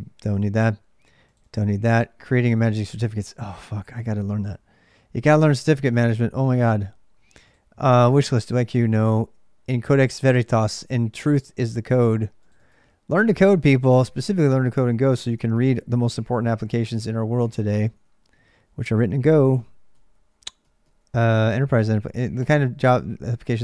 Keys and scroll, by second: 0.0-23.6 typing.